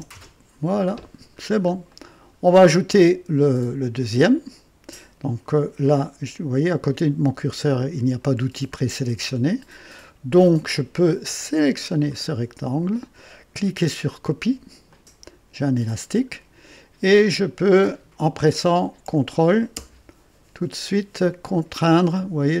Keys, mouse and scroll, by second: 0.1 Return, 1.4 scroll down 1, 1.9 right click, 11.3-12.2 drag, 14.8 click.